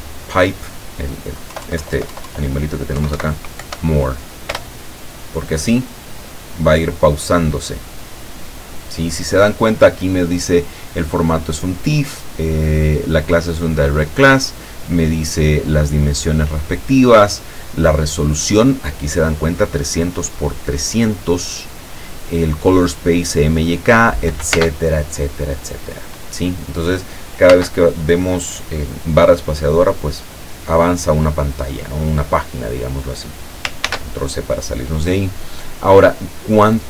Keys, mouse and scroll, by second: 1.5 Left, 3.0 Right, 3.6 End, 4.6 Return, 24.6 space, 27.6 space, 33.9 ctrl+c.